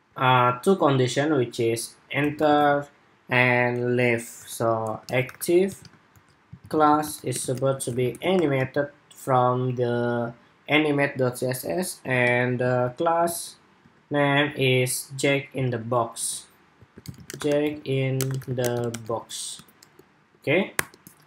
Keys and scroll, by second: 12.4 super+Tab, 13.0 super+Tab, 13.5 super+Tab, 15.3 super+Tab, 15.9 super+Tab.